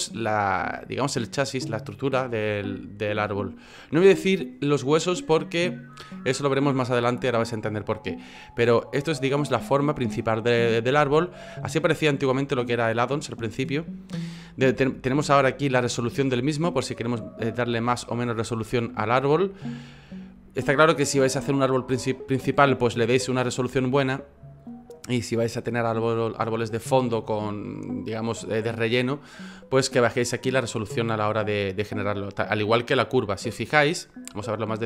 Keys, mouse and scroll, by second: 10.9 F9, 34.1-34.5 scroll up 6, 34.5-34.8 scroll down 2.